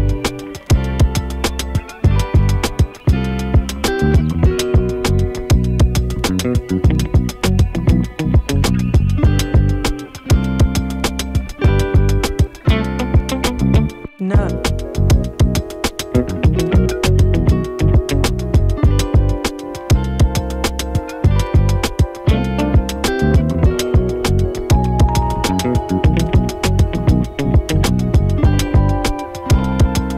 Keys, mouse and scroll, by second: 5.7 =, 6.5-8.5 drag, 8.9 ctrl+c, 10.5 click, 12.1 click, 12.5 click, 20.8 F9, 21.8-27.0 drag, 27.0-30.1 drag.